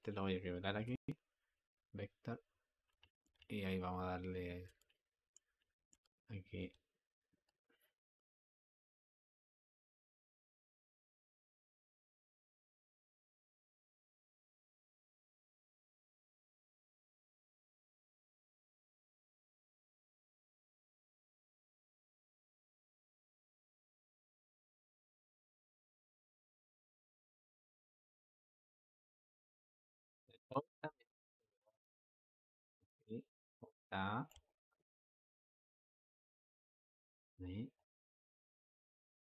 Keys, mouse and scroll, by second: 1.5 v, 7.3-10.8 drag, 17.4-22.0 drag, 23.9-27.0 drag, 31.1 ctrl+z, 32.9 click, 35.3 click, 37.6-39.3 drag.